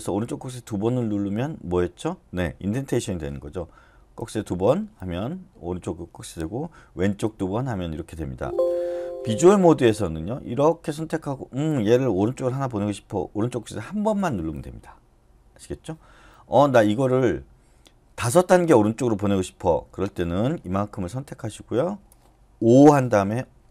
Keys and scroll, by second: 4.1 shift+., 4.4 shift+., 7.0 <, 7.2 <, 9.0 Escape, 22.7 5.